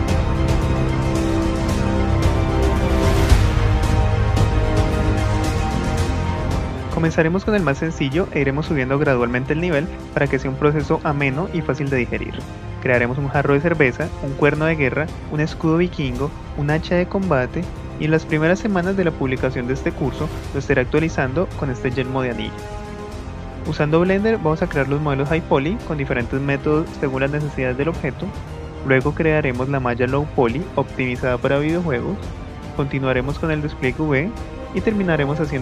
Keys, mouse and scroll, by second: 24.3 ctrl+z, 25.8 KP_1, 26.5 KP_1, 32.0 x.